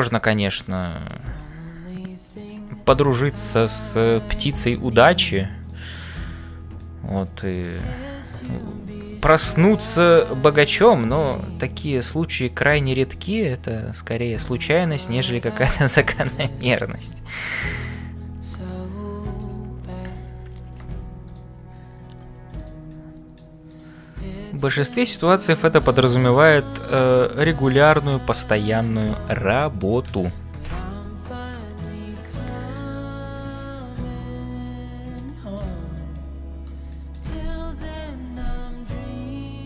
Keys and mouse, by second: 0.0-39.6 typing, 6.8 middle click, 8.8 ctrl+r, 13.1 click, 13.7-14.9 middle drag, 16.5 click, 22.8 click, 25.2 middle click, 26.5 click, 27.9 middle click, 29.6 shift+middle click, 30.5 ctrl+s, 31.6 shift+middle click, 32.0 middle click, 33.3 shift+middle click, 35.2 shift+middle click, 36.9 shift+middle click.